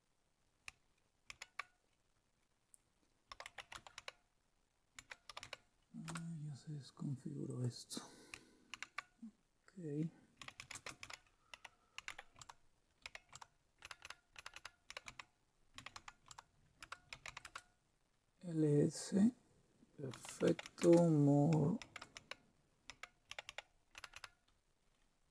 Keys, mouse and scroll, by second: 1.3 super+d, 3.0-5.9 typing, 6.0 Return, 7.4 click, 8.8 super+w, 10.1-17.8 typing, 19.9-25.3 typing.